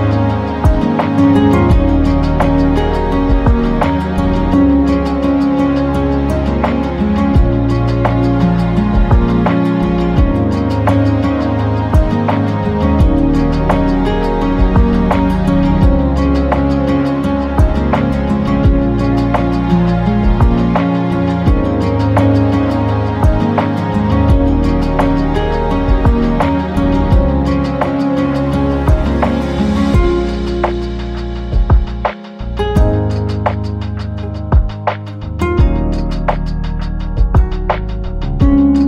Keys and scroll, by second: 7.8 ctrl+g, 22.9 Caps_Lock.